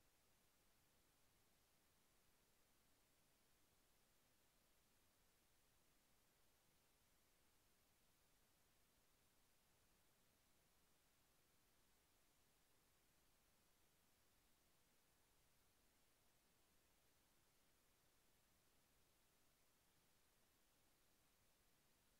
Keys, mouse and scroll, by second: 0.1-0.5 scroll down 1, 1.0 click, 1.8 Delete, 2.7 click, 3.6 Delete, 5.1 click, 7.8 click, 10.3 click, 12.7 click, 14.7 shift+Down, 17.2 Delete, 21.4 click.